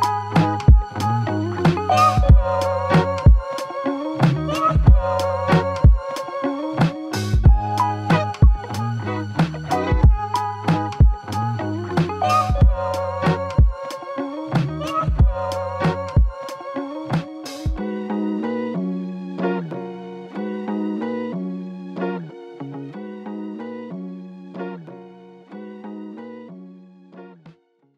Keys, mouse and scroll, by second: 14.9 right click, 18.6 double click.